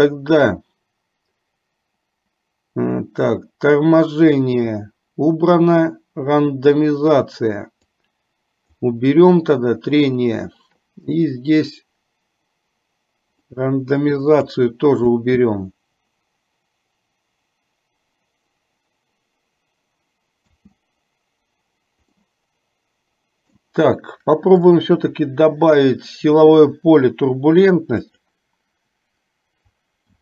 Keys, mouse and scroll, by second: 8.1 click, 13.5-14.9 drag, 15.3 space, 20.6 space, 22.4-23.9 middle drag, 24.8-28.5 drag.